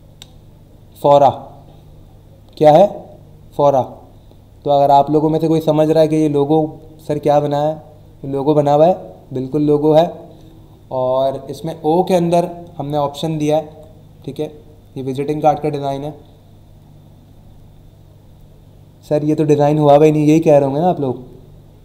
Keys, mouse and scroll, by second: 13.0 Right.